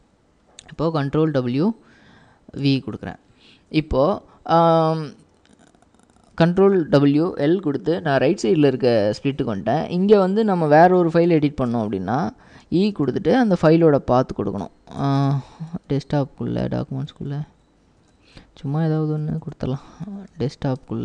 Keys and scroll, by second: 1.1 ctrl+w, 2.7 ctrl+v, 6.3 ctrl+w, 6.7 l, 12.5-13.2 typing, 15.1 Tab, 15.9 Tab, 16.7 Tab, 17.2 Tab, 17.5-18.1 Tab, 18.9-20.9 typing.